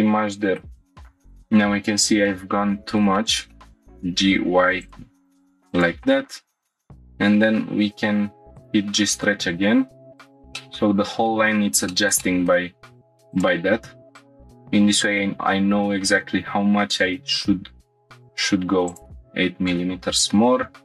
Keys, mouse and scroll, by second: 1.0 click, 2.3 middle click, 3.2 shift+middle click, 3.5 middle click, 3.7 click, 3.7 1, 3.7 g, 3.9 y, 4.8 click, 5.2 2, 5.7 click, 6.7 ctrl+click, 6.7 right click, 10.2 click, 10.6 middle click, 11.6 scroll down 1, 11.9 shift+middle click, 12.2 middle click, 12.7 1, 13.3 click, 15.0 g, 15.3 x, 16.4 y, 18.9 shift+click, 20.4 2.